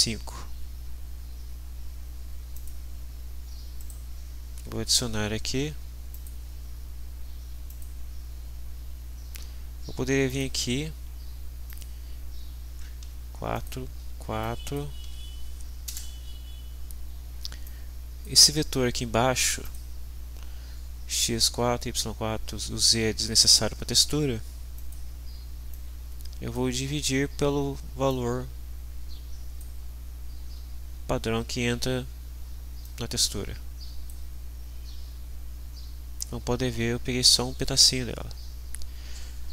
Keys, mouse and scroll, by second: 2.5 click, 3.8 right click, 6.1 click, 7.6 click, 10.2 click, 11.6 click, 13.0 4, 13.5 click, 14.0 4, 14.4 click, 15.0 4, 15.8 Return, 17.6-18.4 drag, 19.6 click, 24.7 click, 25.7-26.7 drag, 28.0-29.7 drag, 32.8-34.2 drag.